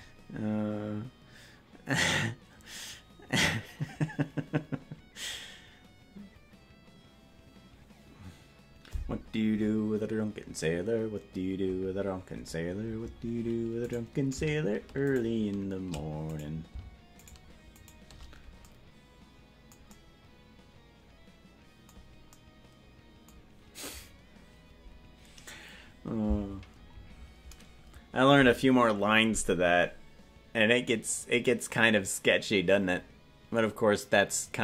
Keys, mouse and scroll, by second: 13.9-15.1 right drag, 16.3-18.6 right drag.